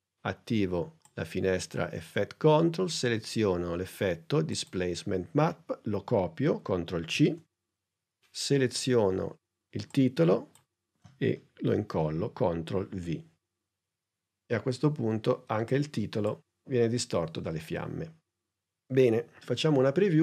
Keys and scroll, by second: 7.1 super+c, 12.8 super+v.